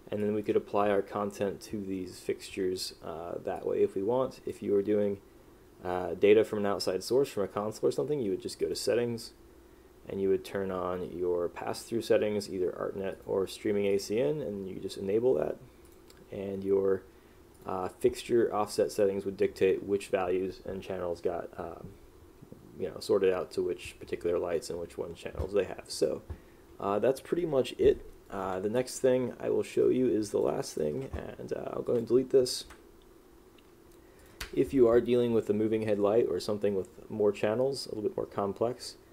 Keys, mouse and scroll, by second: 0.3 click, 3.7 click, 28.9 click, 34.6 Delete.